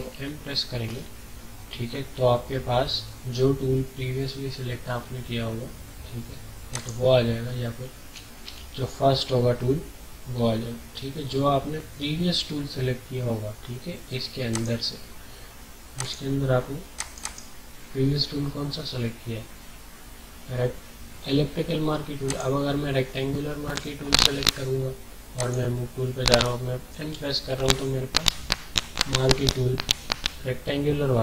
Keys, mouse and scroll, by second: 6.7 click, 6.9 typing, 8.1-8.4 typing, 14.5 click, 14.5 typing, 17.2 right click, 22.2 click, 25.4 click, 27.1 m.